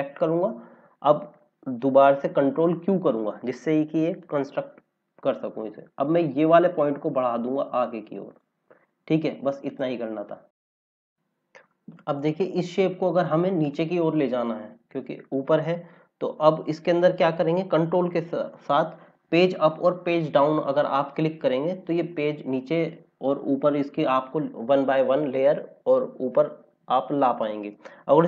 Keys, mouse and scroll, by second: 0.0 click, 2.3 ctrl+q, 4.1 click, 6.5 click, 11.1-11.7 scroll down 1, 11.7-12.1 scroll up 1.